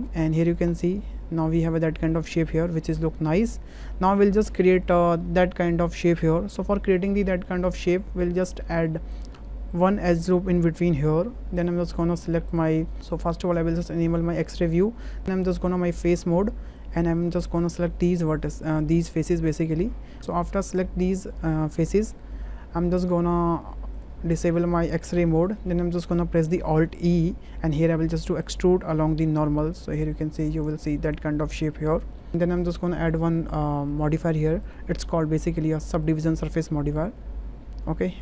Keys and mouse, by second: 1.0-3.5 middle drag, 5.4 shift+middle drag, 6.7 shift+middle drag, 7.2 middle click, 7.9 Tab, 9.1 click, 10.5 click, 14.0 3, 15.2 click, 16.8-19.8 drag, 20.2 ctrl+z, 22.6 middle click, 24.5 shift+middle click, 25.5 shift+middle click, 25.8 middle click, 27.0 alt+e, 31.0 click, 31.8 click, 32.3 Tab, 33.9 click, 34.6-36.1 drag, 36.7-38.0 middle drag.